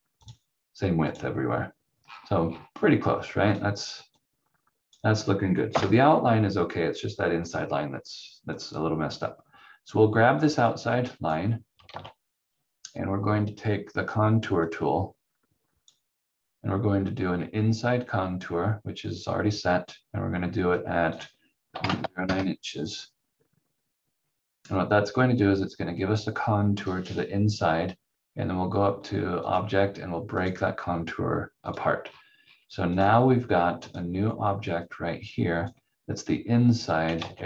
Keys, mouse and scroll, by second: 0.2 click, 2.0 scroll down 1, 3.5 click, 5.7 Delete, 7.4 click, 11.9 ctrl+z, 14.6 click, 20.7 click, 21.5-22.5 typing, 24.2 scroll up 1, 29.5 click, 32.0 scroll down 1, 33.9 click, 37.2 ctrl+z.